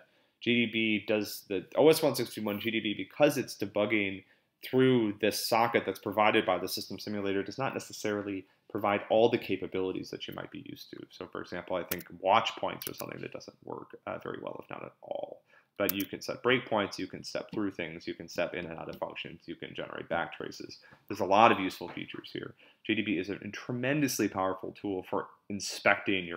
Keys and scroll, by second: 11.9 Tab, 13.0 Tab, 15.9 Tab.